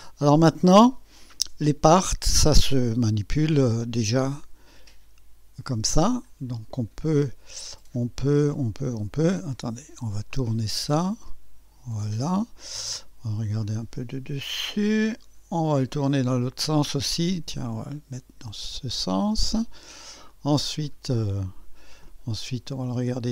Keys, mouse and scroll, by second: 3.0 right click, 4.2 click, 5.6 scroll down 2, 6.1 scroll up 2, 8.2-9.3 drag, 10.3-12.1 drag, 12.6 click, 13.6-15.0 drag, 17.0-19.2 drag, 19.8 scroll down 2, 20.3 click, 21.2 scroll up 2, 22.0 click.